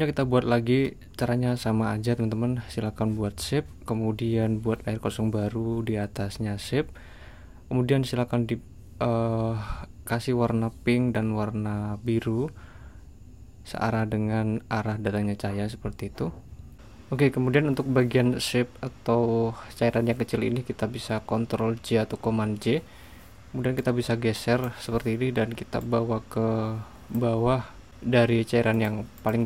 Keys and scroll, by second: 21.1 super+j.